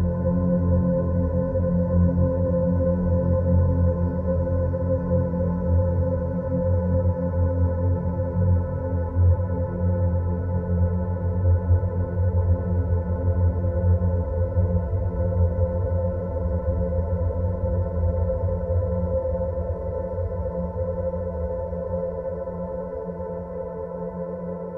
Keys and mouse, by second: 0.5-2.2 drag, 2.9 click, 3.9-5.4 drag, 6.4-8.0 middle drag, 9.1 click, 10.4 click, 15.7 click, 18.7 middle click, 20.1 click, 21.9-22.7 middle drag, 23.0 Tab.